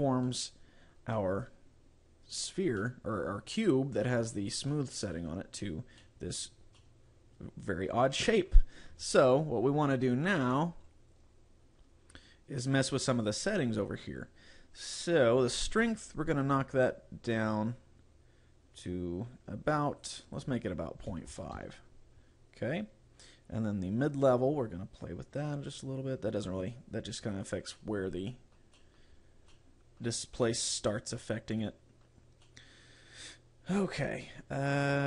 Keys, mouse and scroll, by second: 0.3 middle click, 1.3 middle click, 2.8 middle click, 3.6 middle click, 4.7 middle click, 6.1 middle click, 6.9 middle click, 16.6 click, 20.3 click, 25.1 click, 27.8 middle click, 28.9 middle click, 29.5 middle click, 30.5 middle click, 32.7 middle click.